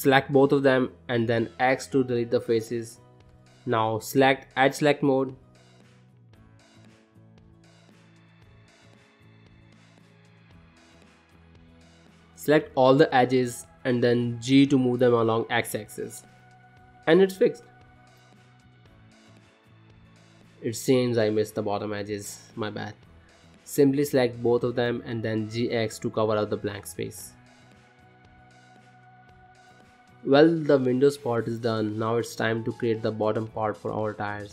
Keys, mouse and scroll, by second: 0.0 click, 0.5 middle click, 1.4 shift+click, 1.7 middle click, 2.5 x, 3.5 middle click, 5.8 click, 6.5 click, 6.8 middle click, 8.1 middle click, 8.9 shift+click, 9.5 ctrl+middle click, 9.6 shift+middle click, 10.5 click, 11.2 shift+click, 11.6 shift+click, 11.9 middle click, 12.4 ctrl+middle click, 13.2 g, 15.1 ctrl+middle click, 16.1 middle click, 16.9 shift+middle click, 17.2 middle click, 18.1 shift+middle click, 18.4 middle click, 19.0 shift+middle click, 19.3 middle click, 20.3 click, 21.3 KP_Decimal, 22.2 scroll down 1, 22.4 middle click, 23.0 ctrl+middle click, 24.2 click, 24.9 click, 25.5 shift+click, 26.4 g, 28.3 middle click, 28.7-29.8 scroll down 14, 28.9 middle click, 30.1 shift+middle click, 30.4 middle click, 30.9 shift+middle click, 31.0 click, 31.5 middle click, 32.4 middle click, 32.9 shift+middle click, 33.4 middle click, 33.9 scroll down 2, 34.2 middle click, 34.3 shift+middle click.